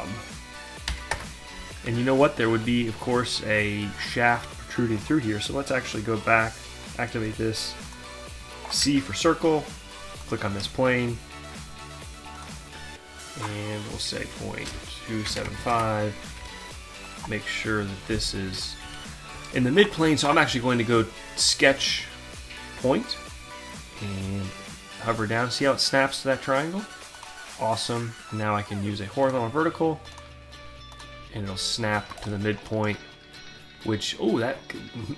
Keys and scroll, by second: 0.0-0.9 typing, 1.1 Return, 1.9 alt+Tab, 8.3 c, 13.5 Delete, 14.2 2, 15.3 5, 15.5 Return, 16.4 d, 18.9 Escape.